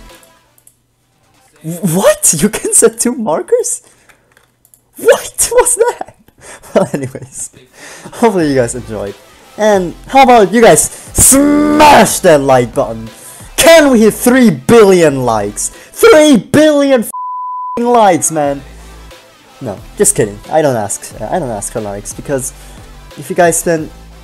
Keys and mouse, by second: 0.3 click, 0.3 x, 0.7-1.9 drag, 1.9 alt+a, 3.1 m, 4.6 g, 7.0 click, 7.6 alt+a, 15.2-16.4 middle drag.